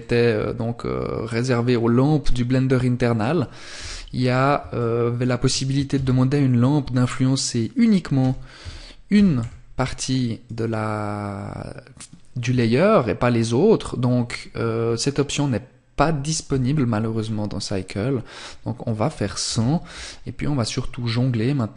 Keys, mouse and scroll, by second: 2.9 KP_1, 3.9 shift+middle click, 6.7 click, 7.3 r, 9.6 click, 16.3 scroll up 1, 18.5 KP_0, 19.5 scroll up 1, 20.6-21.1 scroll up 1, 21.1 click.